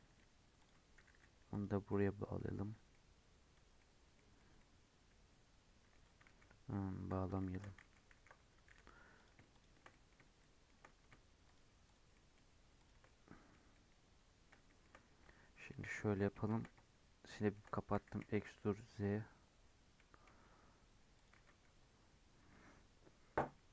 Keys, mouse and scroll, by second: 0.5 click, 0.9 g, 1.8 middle click, 2.4 3, 2.9-4.3 middle drag, 4.3 scroll down 1, 4.5-6.2 middle drag, 6.2 ctrl+z, 6.5 ctrl+z, 7.2 scroll down 2, 7.3 shift+middle click, 7.8 ctrl+z, 8.1 ctrl+z, 8.6 3, 9.1 click, 9.5 shift+click, 9.8 middle click, 10.8-11.4 scroll up 2, 11.4 shift+click, 11.8 shift+click, 12.1 shift+middle click, 12.7 shift+click, 13.0-15.6 middle drag, 15.6 KP_1, 16.4 shift+Tab, 17.3 shift+middle click, 17.9 e, 21.3 alt+z.